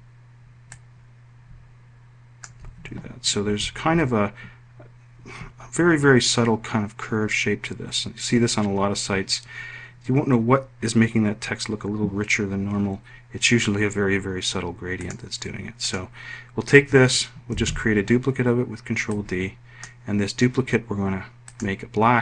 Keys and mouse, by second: 3.5 F1, 15.1 click, 15.9 click, 17.6 ctrl+d, 19.2 click.